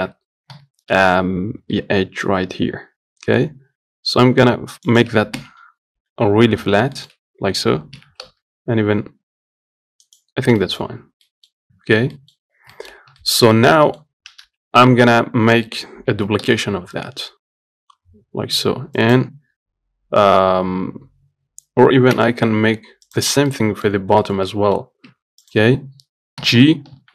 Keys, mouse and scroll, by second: 0.8 g, 5.7 KP_1, 6.9-7.2 scroll up 2, 7.2 shift+middle click, 7.6-8.2 scroll up 1, 8.2 g, 10.6 scroll down 2, 10.9 middle click, 11.3 Tab, 11.5 middle click, 11.8-12.4 scroll down 1, 12.4 middle click, 12.8 scroll down 1, 13.0 shift+middle click, 13.3 scroll up 1, 13.5-14.7 shift+middle drag, 14.7 KP_1, 16.4 shift+d, 22.4 Delete, 23.3 click, 23.8 middle click, 24.2 scroll up 1, 24.5 shift+middle click, 25.1 scroll up 1, 25.4 Tab, 25.7 click, 26.7 g.